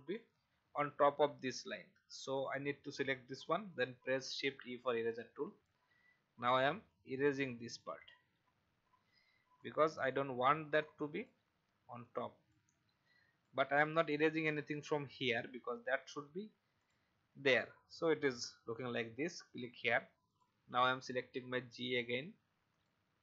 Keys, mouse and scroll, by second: 4.5 shift+e, 6.5-14.1 drag, 13.9 v, 16.8 click, 17.8-18.3 alt+scroll down 1, 19.5 click.